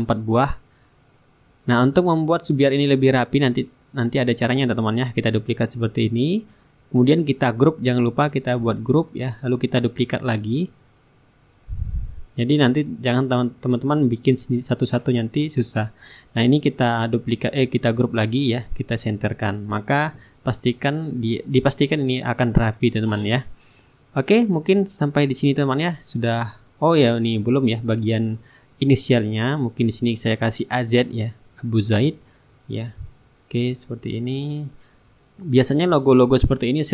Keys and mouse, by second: 2.0 shift+middle click, 2.6 shift+click, 3.2 right click, 3.8 ctrl+d, 4.3-8.6 ctrl+drag, 9.2 ctrl+g, 9.6-13.0 middle drag, 10.4 ctrl+d, 11.4-13.0 shift+drag, 11.4-13.0 shift+right drag, 13.4-16.4 ctrl+drag, 16.5 shift+click, 17.5 ctrl+g, 18.4 shift+click, 19.9 click, 21.1-26.6 drag, 22.8-26.6 shift+right drag, 23.6-26.6 middle drag, 27.4-28.8 middle drag, 28.9 click, 30.7 a, 31.0 z, 31.7 ctrl+a, 32.9 click, 34.1 click, 35.4-36.9 drag.